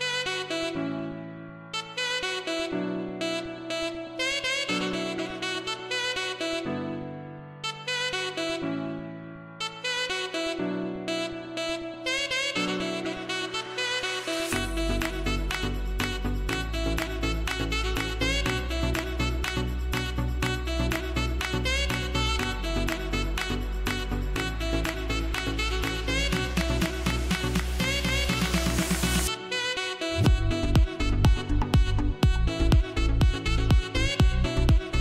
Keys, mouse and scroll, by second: 2.9-4.6 scroll down 1, 7.1 click, 7.7 click, 15.2 ctrl+Num_Lock, 15.2 click, 15.5 ctrl+j, 17.0 click, 22.4-27.0 drag, 31.0-32.1 typing, 33.2 e, 33.6-34.1 scroll up 1, 34.3-35.0 typing.